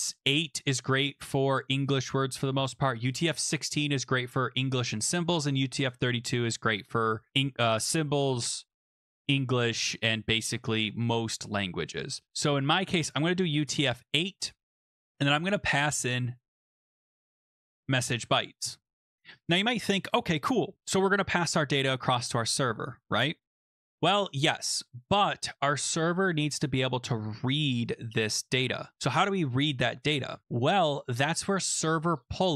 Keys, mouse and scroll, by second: 13.0 click, 13.1 click, 14.9 click, 16.6-18.0 typing, 18.3 ctrl+s, 28.9 click.